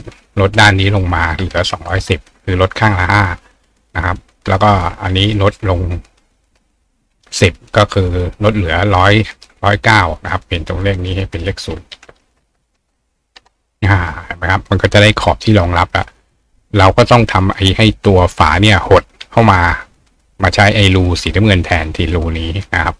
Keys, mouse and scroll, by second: 4.0 click, 11.0 click.